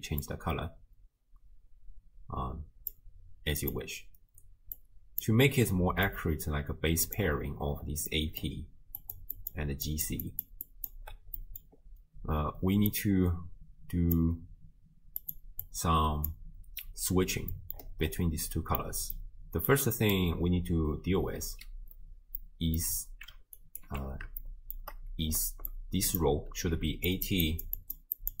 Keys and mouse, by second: 4.8 click, 6.2-7.3 drag, 8.1 click, 8.7-11.1 typing, 9.0 click, 9.3 click, 10.3 click, 10.9 click, 11.4 click, 12.9-14.3 drag, 15.2 click, 15.6 click, 17.5 middle click, 18.9 middle click, 19.8 click, 22.4 click, 23.6 ctrl+alt+click, 24.6 shift+click, 25.2-28.4 typing, 25.7 click, 27.1 click, 27.4 click, 27.8 click.